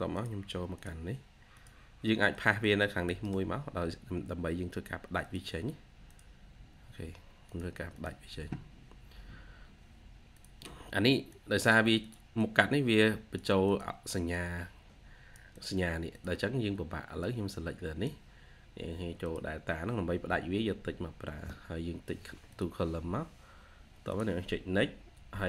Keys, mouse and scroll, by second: 2.8 double click, 3.1 right click, 7.8 double click, 8.1 typing, 12.2 double click.